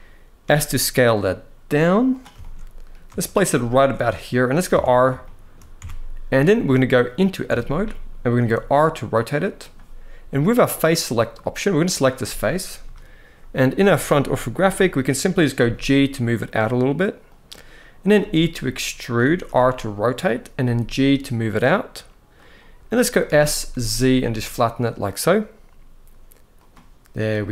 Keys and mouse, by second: 0.1 s, 2.1 shift+middle click, 2.9 shift+middle drag, 3.3 g, 4.1 click, 4.4 Tab, 4.9 shift+middle click, 5.5 Tab, 7.2 Tab, 8.1 r, 9.1 click, 10.6 middle click, 11.4 click, 12.5 KP_1, 14.0 shift+middle click, 15.2 g, 16.9 click, 17.9 e, 18.7 click, 19.1 r, 20.3 g, 22.0 click, 22.9 s, 26.0 z, 26.2 click.